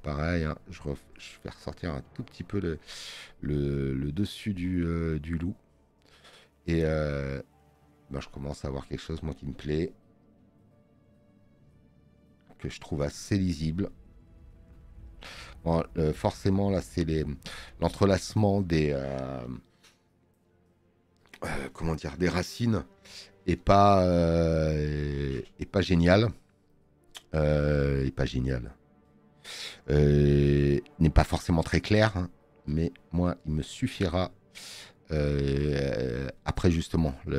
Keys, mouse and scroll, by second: 8.2 scroll up 1, 9.8 click, 26.4 scroll up 1, 27.4 space, 27.6 click.